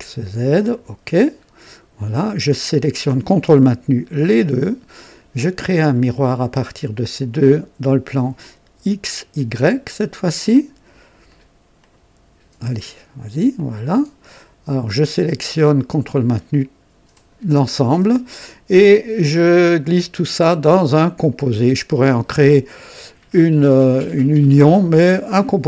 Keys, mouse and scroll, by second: 0.6 click, 1.2-2.7 drag, 4.1 ctrl+click, 6.0 click, 11.2 click, 11.8 click, 12.6 click, 13.5-15.9 drag, 16.5 ctrl+click, 17.1 ctrl+click, 25.4 click.